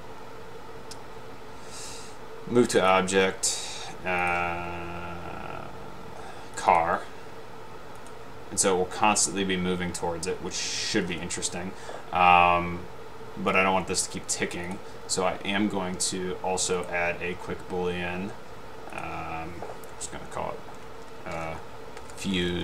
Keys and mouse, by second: 2.8 click, 4.4 click, 6.7 click, 6.8 click, 14.8 click, 16.9 right drag, 19.1 click, 22.0-22.6 typing.